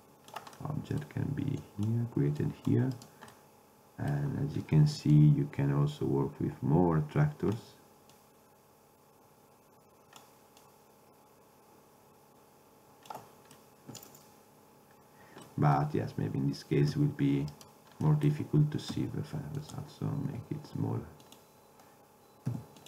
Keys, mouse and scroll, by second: 1.6 middle click, 2.3 middle drag, 3.4-4.6 middle drag, 5.2-7.0 drag, 8.2-10.0 drag, 10.7-12.4 drag, 13.6 middle drag, 14.7-15.4 middle drag, 17.0 ctrl+Tab, 19.0 s, 20.4 g, 22.6 g.